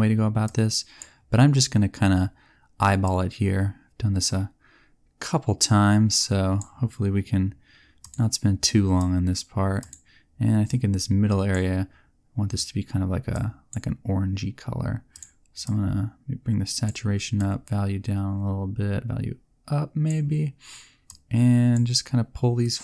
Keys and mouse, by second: 7.9 click, 21.0-22.8 drag.